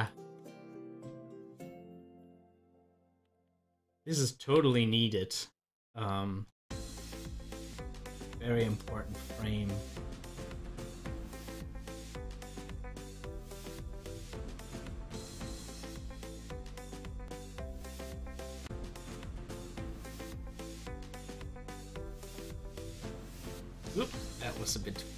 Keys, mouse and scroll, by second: 0.2 click, 1.5 click, 2.8 click, 4.0 click, 4.4 typing, 6.2 typing, 7.8-14.2 drag, 18.5-21.7 drag, 23.4-24.3 typing.